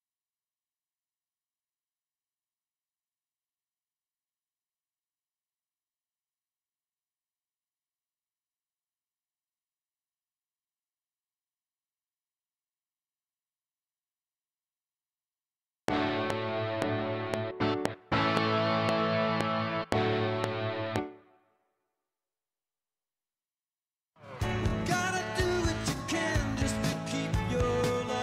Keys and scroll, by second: 15.7 space, 16.8 ctrl+s, 20.9 space, 24.2 ctrl+space, 27.5 alt+Tab.